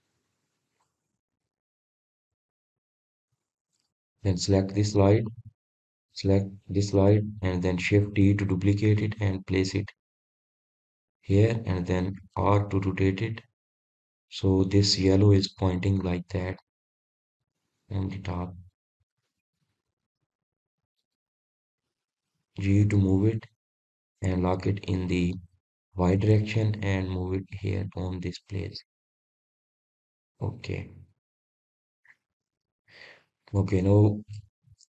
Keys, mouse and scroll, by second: 6.7 click, 7.6 click, 9.8 shift+d, 19.8-21.2 middle drag, 21.2 click, 21.9 scroll up 1, 22.2-23.1 scroll down 1, 23.1 click, 31.5 click, 31.9-33.7 middle drag, 33.7-34.0 scroll up 1, 34.0-34.5 scroll down 1, 34.5 click.